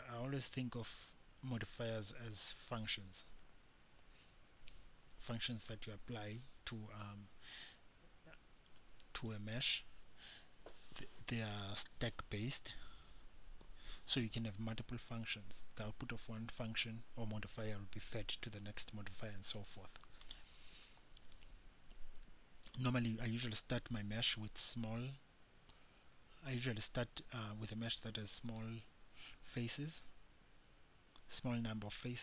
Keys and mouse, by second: 24.7-32.2 middle drag.